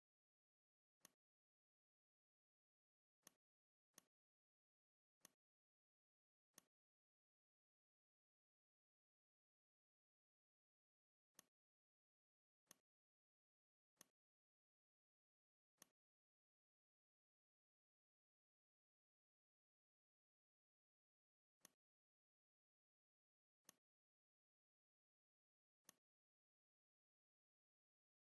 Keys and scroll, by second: 2.8 z, 3.7 space, 4.6 v, 17.5 ctrl+g, 23.3 z, 24.5 m.